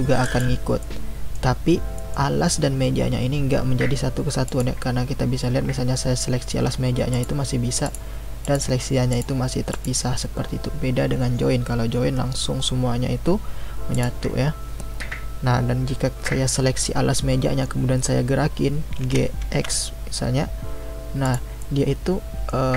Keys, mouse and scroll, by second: 0.8-4.5 middle drag, 4.5 click, 7.1 click, 7.8 click, 8.4 click, 9.1 click, 9.7 click, 13.9 click, 19.0 g, 21.6-22.7 middle drag.